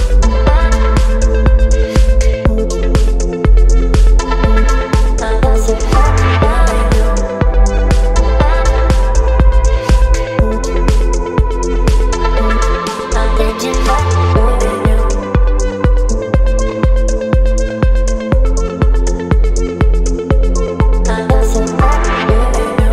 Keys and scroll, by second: 22.5 space.